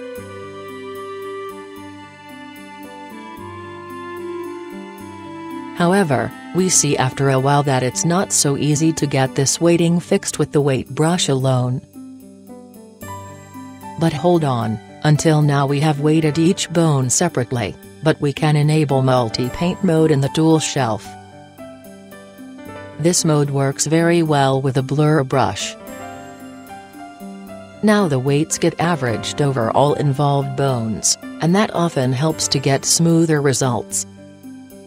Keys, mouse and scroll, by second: 3.0-4.0 middle drag, 4.7-10.8 drag, 5.0 middle click, 7.1-8.7 middle drag, 9.8-11.3 middle drag, 11.0-15.1 drag, 14.3-15.0 middle drag, 15.3-16.1 drag, 16.3-18.4 drag, 18.4-22.1 middle drag, 24.7-26.6 drag, 26.6 middle click, 27.0-34.8 drag, 33.7-34.8 middle drag.